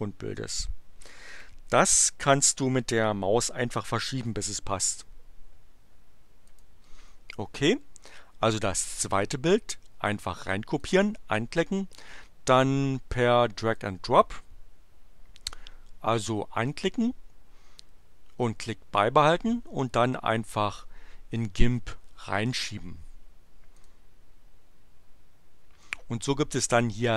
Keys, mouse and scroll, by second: 6.5 click, 10.7 click, 13.2-14.0 drag, 16.7-22.9 drag, 23.8 click.